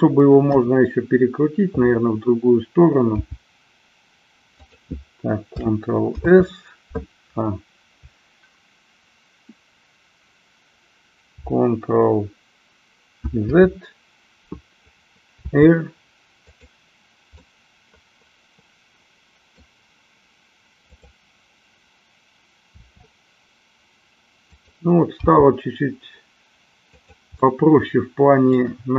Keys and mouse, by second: 0.4 KP_1, 3.1 g, 4.7 click, 13.7 ctrl+z, 15.4 r, 16.7 click, 17.4-19.7 middle drag, 20.8-22.3 drag, 22.8 r, 24.7 click, 25.3 g, 27.1 click, 27.6-28.7 middle drag.